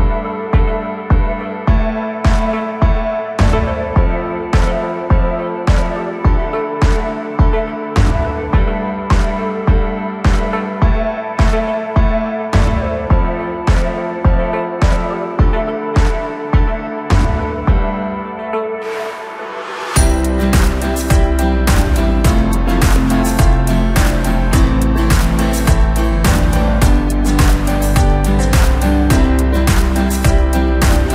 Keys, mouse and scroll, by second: 3.3-3.9 scroll up 3, 3.9 scroll down 2, 4.3 click, 4.8 scroll up 1, 5.5 scroll up 1, 6.7 drag, 10.7 scroll up 1, 11.6 shift+click, 12.7 shift+click, 13.3 shift+click, 14.0 shift+click, 14.7 scroll down 1, 14.9-16.5 middle drag, 16.5 shift+click, 17.3 KP_1, 18.2-18.6 scroll up 1, 18.6-18.9 scroll down 2, 19.0 x, 21.2-22.2 drag, 22.2 x, 23.2-25.0 middle drag, 25.0 click, 25.9 a, 26.5 KP_1, 27.9-30.0 drag, 30.0-31.1 right drag.